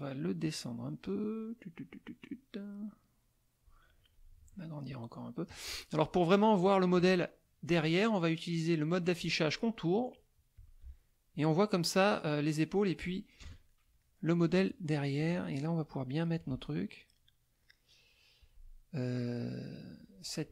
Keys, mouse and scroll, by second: 0.4-3.9 drag, 4.9 shift+click, 7.7 click, 10.5 click, 13.4 KP_Add, 14.0 click, 15.2-16.5 ctrl+drag, 16.6 ctrl+click, 17.2 ctrl+click, 19.5 click.